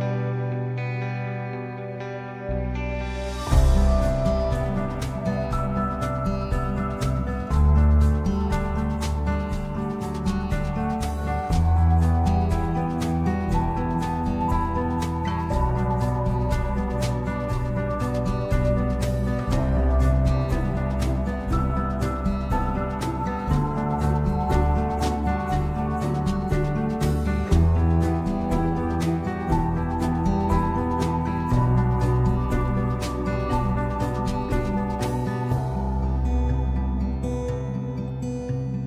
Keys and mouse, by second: 4.2 middle click, 6.0 shift+middle click, 7.1 shift+middle click, 8.1 g, 8.6 x, 10.9 Tab, 11.5 middle click, 12.0 shift+middle click, 13.1 middle click, 13.5 a, 14.5 middle click, 15.9 middle click, 18.4 ctrl+shift+c, 19.7 ctrl+shift+s, 20.5 space, 21.6 shift+Left, 23.5 space, 25.0 space, 25.2 shift+Left, 26.1 shift+space, 30.8 middle click, 32.8 middle click, 33.7-37.4 drag, 37.9 click.